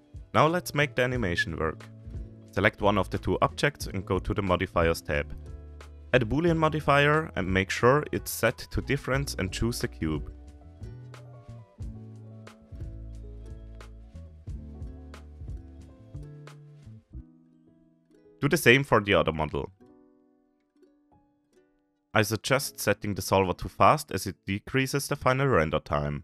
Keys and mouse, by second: 0.0 ctrl+s, 1.0 click, 3.6 middle click, 5.2-8.9 middle drag, 10.8 middle click, 11.6-17.3 middle drag, 18.2 ctrl+s, 18.2 middle click, 19.6-21.2 middle drag.